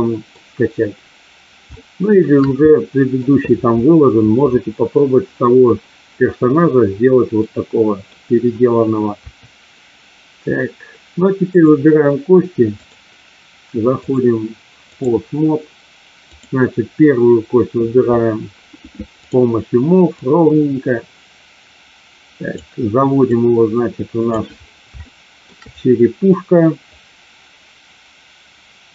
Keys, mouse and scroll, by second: 1.7-2.4 shift+middle drag, 2.7 middle click, 7.4-8.1 middle drag, 9.1 KP_3, 11.4 click, 12.7 click, 14.0-15.0 drag, 16.2-17.2 drag, 20.1-22.5 drag, 23.2-24.4 drag, 24.9 shift+middle click, 26.9-28.9 drag.